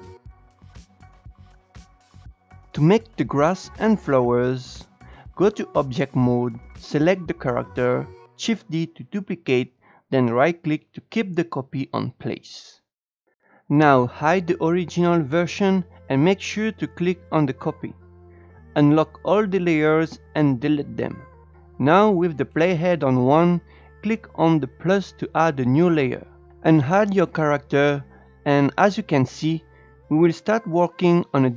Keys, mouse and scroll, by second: 2.1 click, 4.6 Tab, 5.6 click, 6.7 click, 9.7 shift+d, 13.2 click, 17.7-19.8 drag, 20.4 click, 22.3-24.2 drag, 28.7 click, 31.0-31.5 drag.